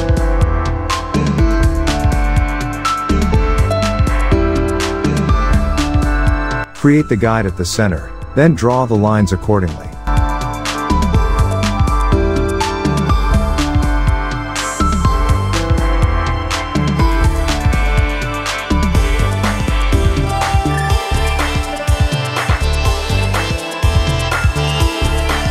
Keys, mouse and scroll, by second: 0.3 alt+scroll up 1, 1.5 ctrl+r, 2.3-4.6 drag, 4.6 space, 4.6 click, 6.3 space, 6.4-7.0 click, 6.9 space, 7.0-7.5 click, 7.5 alt+scroll up 1, 7.6 space, 7.9 click, 8.1 space, 8.8 click, 12.1 click, 15.6 alt+scroll up 1, 16.5 click, 18.6-20.1 alt+shift+drag, 20.0 space, 20.3 click, 22.9-25.5 drag.